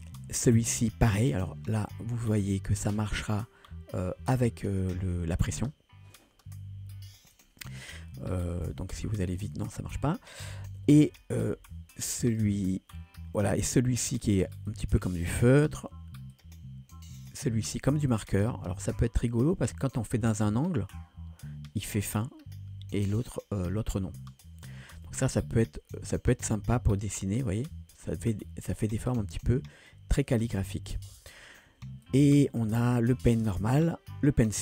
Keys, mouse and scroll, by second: 1.9-4.1 drag, 7.4 click, 8.7-9.8 drag, 10.8 ctrl+z, 11.1 ctrl+z, 11.5 ctrl+z, 12.3-14.4 drag, 14.7 click, 15.7 ctrl+z, 16.3-17.5 drag, 18.1-24.0 drag, 25.1 ctrl+z, 26.0-30.0 drag, 31.0 ctrl+z, 32.1-34.6 drag.